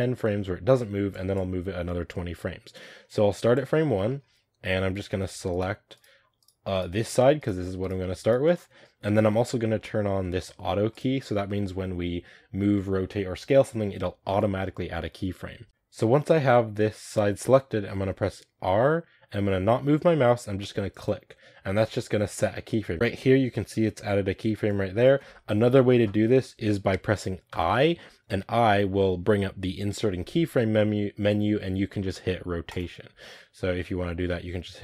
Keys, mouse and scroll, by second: 4.0-4.8 middle drag, 4.8 right click, 5.4 shift+right click, 5.8 shift+right click, 6.3 shift+right click, 6.6 shift+right drag, 6.9 shift+right click, 7.3 shift+right click, 7.7 shift+right click, 8.1 shift+right click, 15.7 r, 18.6 r, 22.9-32.7 drag.